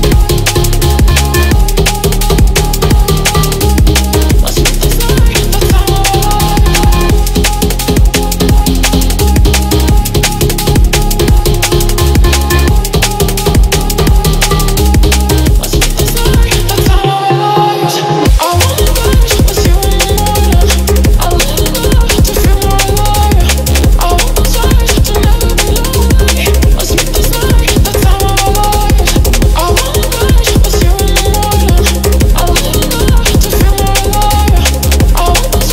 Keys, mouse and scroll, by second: 1.2-2.0 drag, 3.8-4.7 scroll down 2, 6.6-7.0 scroll down 1, 7.8-8.6 scroll down 2, 8.6 scroll down 1, 9.9-10.6 drag, 11.5 click, 11.8 scroll up 1, 12.2 middle click, 12.6 shift+a, 16.3 click, 17.8-19.0 drag, 19.7-20.8 drag, 21.2-21.7 scroll up 2, 24.9-25.6 scroll down 2, 25.8 shift+middle click, 26.9-27.5 shift+drag, 28.4 shift+click, 29.0 shift+click, 29.4 shift+click, 30.3-31.0 drag, 31.8 ctrl+c, 32.8-33.7 scroll down 2, 33.7 click, 34.0-34.6 scroll up 4, 34.8-35.2 shift+middle drag, 35.4-35.7 scroll up 1.